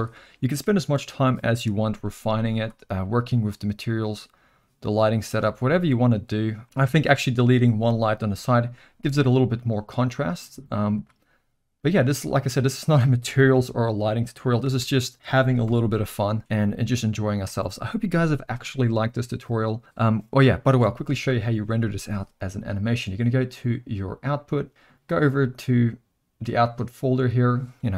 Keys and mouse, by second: 1.9 z, 3.3 click, 5.4 x, 11.0 click, 11.7-12.3 middle drag, 13.1 shift+click, 13.5 g, 14.6 r, 15.6 KP_0, 17.5 space, 20.8 space, 24.3 click, 27.3 click.